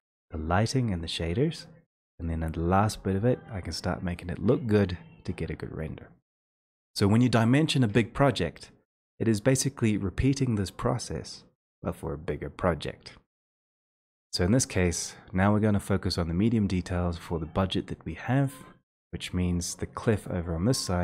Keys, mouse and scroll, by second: 18.9-21.0 drag.